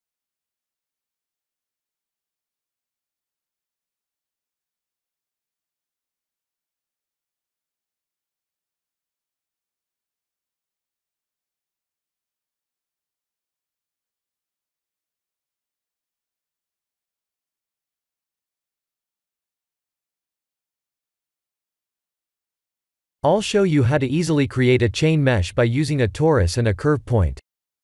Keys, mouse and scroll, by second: 4.7 click, 7.7 click, 8.5 right click, 10.0 click, 10.5 middle click, 11.3 middle click, 12.5 middle click, 13.9 shift+z, 14.9 middle click, 15.6 middle click, 16.0 shift+z, 16.4-17.0 scroll down 8, 17.3 shift+z, 17.9 shift+z, 18.5 scroll down 1, 19.2 KP_1, 20.1 click, 23.2 click, 25.5 click, 27.1 shift+a.